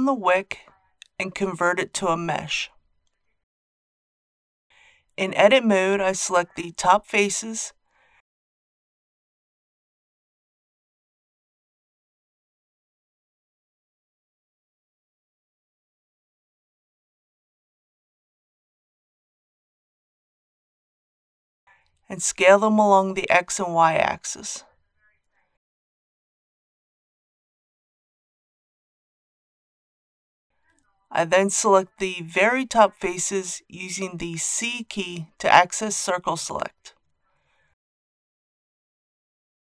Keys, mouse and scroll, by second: 1.9 click, 4.8 Tab, 5.7 scroll up 1, 6.0 scroll down 1, 6.1 scroll up 1, 7.1 shift+middle click, 8.4 shift+3, 10.1 alt+click, 10.8 middle click, 11.8 scroll up 1, 12.1 shift+middle click, 13.4 ctrl+z, 14.4 middle click, 14.8 scroll up 1, 16.7 shift+click, 17.1 shift+click, 17.8 shift+click, 18.4 shift+click, 18.7 shift+click, 19.0 shift+click, 19.3 shift+click, 20.6 shift+click, 20.9-21.3 scroll down 1, 21.3 middle click, 22.2 s, 22.7 shift+z, 26.3 click, 27.1-28.3 middle drag, 28.6 shift+middle click, 29.2 middle click, 31.4 alt+a, 35.8 c, 37.6-38.3 scroll up 1.